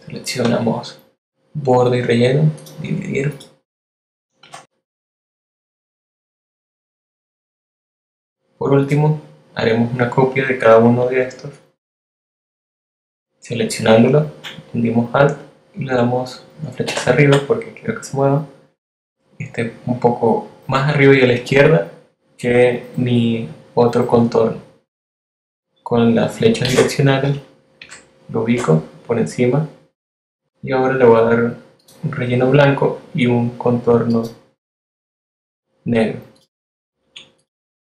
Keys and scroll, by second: 4.4 BackSpace, 5.6 shift+a, 7.9 v, 16.8 alt+Up, 26.6 Up, 27.2 Left, 28.4 Up, 33.1 z.